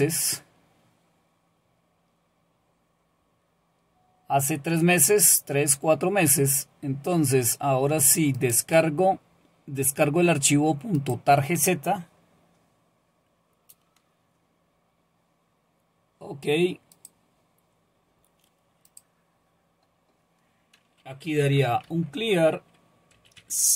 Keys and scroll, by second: 21.0-23.7 typing.